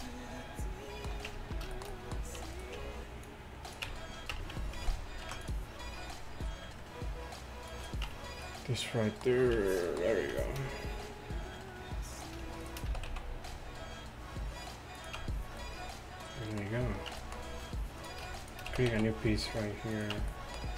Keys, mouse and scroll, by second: 1.3 Tab, 3.3-4.4 drag, 3.3 right click, 3.9 Tab, 4.4 Tab, 5.3 ctrl+r, 8.1 Tab, 9.6 Tab, 12.2-15.0 right drag, 13.0 s, 15.2 Tab, 17.2 Tab, 18.8 s, 20.0 click, 20.2 Tab.